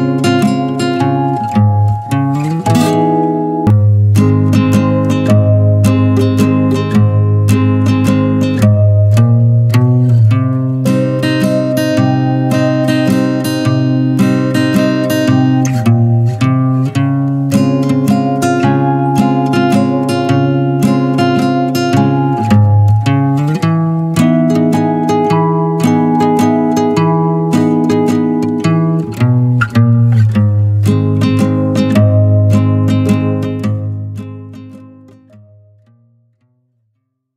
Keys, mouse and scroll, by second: 0.4-3.6 middle drag, 3.6 ctrl+z, 4.6 click, 5.3 click, 5.5 scroll down 1, 5.8-8.6 middle drag, 8.6 click, 9.3-12.4 middle drag, 12.4 shift+click, 12.7 shift+click, 13.0 middle click, 13.4 e, 13.7 alt+s, 14.8-16.7 middle drag, 16.7 Tab, 16.9 click, 17.2 shift+middle click, 17.3 shift+scroll up 2, 17.6-17.9 middle drag, 17.9 Tab, 18.2 middle click, 19.0 Tab, 20.0-26.8 middle drag, 26.8 click, 27.1 click, 27.8 click, 28.0 click, 28.6 scroll down 2, 28.8-29.4 middle drag, 29.4-30.1 scroll up 2, 30.1-31.1 middle drag, 31.1 click, 31.4 click, 32.0 click, 32.3 click, 32.9 scroll down 1, 33.1-35.7 middle drag, 35.7 click.